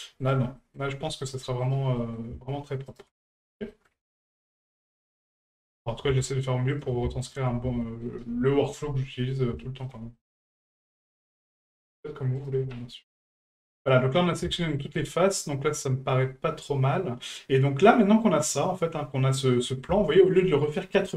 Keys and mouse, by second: 0.2 shift+right click, 0.6 middle drag, 1.6 ctrl+right click, 2.0 middle drag, 2.9 shift+right click, 3.4 ctrl+right click, 3.7 middle click, 4.9 shift+right click, 5.5 ctrl+right click, 5.8 middle click, 6.7 shift+right click, 7.2 ctrl+right click, 7.8 shift+middle drag, 9.6 shift+middle drag, 10.1 middle drag, 10.7 shift+middle drag, 11.2 middle click, 11.8 shift+right click, 12.4 shift+right click, 12.7-14.3 middle drag, 14.6 shift+middle drag, 15.1-19.8 middle drag, 20.1 shift+middle drag.